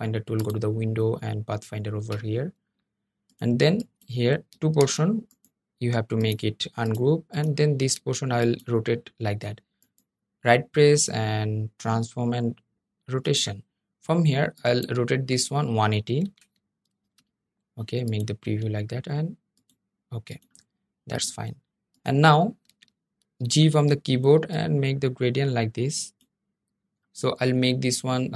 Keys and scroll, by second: 2.2 ⟲, 2.3 Escape, 2.6 ⟲, 4.5 super+z, 22.4 g.